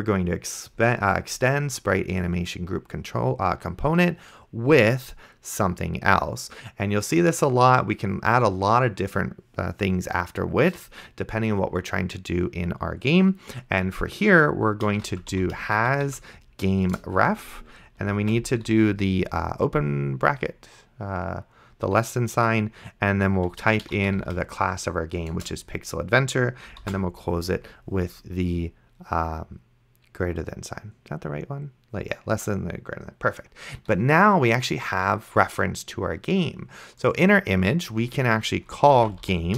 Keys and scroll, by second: 14.9-16.1 typing, 16.9 Return, 18.5 shift+,, 23.6-24.6 typing, 25.4 Return, 27.2 shift+., 39.0-39.5 typing.